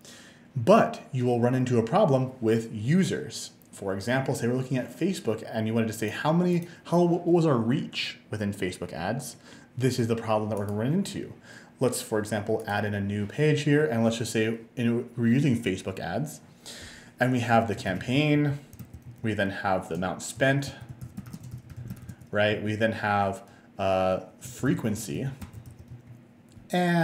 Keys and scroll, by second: 17.6-19.4 typing, 20.5-22.5 typing, 22.6 Tab, 24.5-26.2 typing.